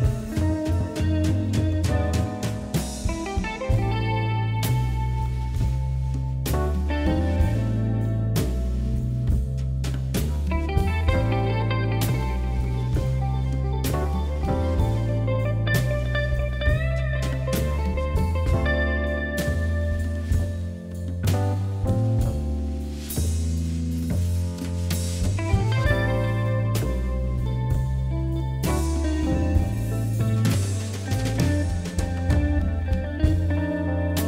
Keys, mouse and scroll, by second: 1.3 Tab, 1.8 KP_Divide, 2.4 KP_7, 2.7-3.2 scroll down 1, 3.2-4.6 shift+middle drag, 4.6 shift+d, 7.3-7.7 shift+r, 9.3-9.9 middle drag, 9.9-10.4 scroll up 2, 10.4 shift+click, 11.1 click, 11.3 middle click, 11.7-12.1 scroll up 2, 12.1-12.7 middle drag, 12.7 click, 13.0 click, 13.5 shift+click, 14.6 shift+click, 15.0 shift+click, 15.3 shift+click, 15.6 shift+click, 15.9 shift+click, 16.3 shift+click, 17.1 shift+click, 18.0 KP_7, 18.4 scroll down 2, 19.3 shift+d, 22.1 r, 24.2 y, 25.4 shift+d, 26.3 r, 28.1 click, 28.4-29.2 middle drag, 29.2-29.7 scroll up 4, 29.7-31.1 middle drag, 31.3 KP_1, 32.3-32.8 shift+middle drag, 32.8 shift+right click, 33.1 click, 33.6 shift+right click.